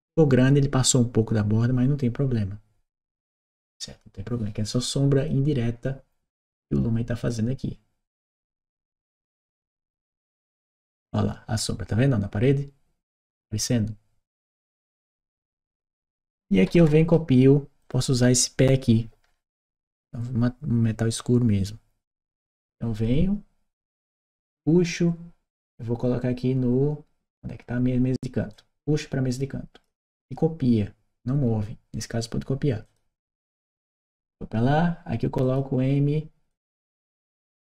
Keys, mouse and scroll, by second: 3.1 click, 5.0 click, 7.0 click, 8.6-9.8 right drag, 10.5-14.9 drag, 15.1-16.9 right drag, 17.6 click, 21.9 click, 28.3-29.6 drag, 32.7 click, 34.1 click, 35.2 click, 36.3 click.